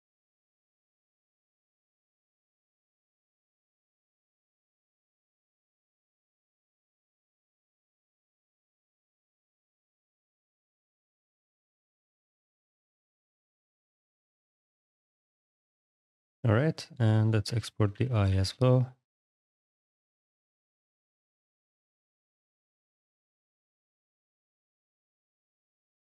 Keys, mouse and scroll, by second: 1.1 ctrl+a, 1.6-6.3 typing, 4.6 ctrl+a, 5.3 click, 6.5 alt+x, 7.2 click, 8.2 ctrl+v, 9.0 click, 9.5 h, 9.7 i, 9.9 g, 10.0 h, 10.5 click, 15.3 click, 16.6 click, 17.3-20.2 typing, 20.5 alt+x, 21.0 click, 22.0 ctrl+v, 24.2 click, 25.4 click.